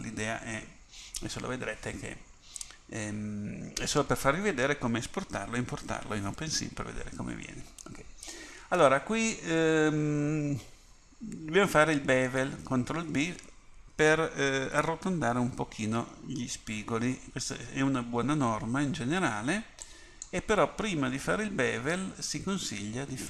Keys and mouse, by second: 8.8 a, 19.9-22.0 drag, 21.1 Tab.